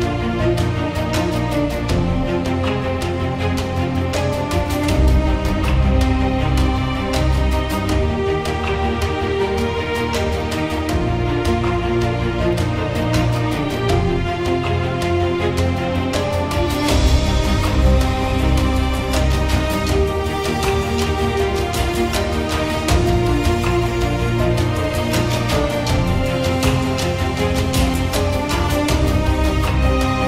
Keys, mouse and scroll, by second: 0.0 click, 0.8 click, 1.5 click, 1.7 right click, 1.9 click, 1.9 click, 2.1 click, 2.3-2.7 [, 2.8 [, 3.7 click, 4.4 click, 5.6 click, 5.7 ], 5.9 ], 6.6 click, 7.1 ], 7.2 ], 7.4 ], 7.5 click, 7.6 right click, 8.1 click, 8.4 click, 10.8 click, 12.1-13.3 scroll, 14.1 click, 15.9-17.4 typing, 18.4 click, 18.6 ], 18.7 ], 19.4 click, 19.5 click, 20.2 click, 20.5 ctrl+z, 20.8 [, 20.9 [, 21.1 click, 21.5 shift+click, 22.1 click, 22.2 click, 22.6 ], 22.7 ], 22.9 ], 23.1 x, 23.3 right click, 23.6 click, 23.7 click, 24.3 click, 26.5 click, 27.4 x, 27.5 right click, 27.9 click, 28.0 click, 28.4 [, 28.6 [, 28.9 click, 29.1 ctrl+z, 29.4 x.